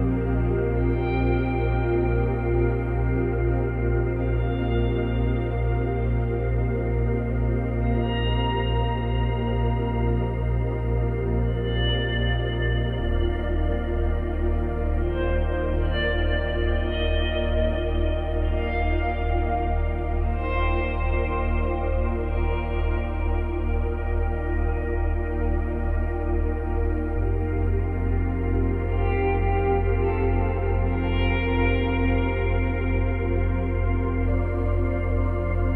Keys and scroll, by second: 23.4 Delete.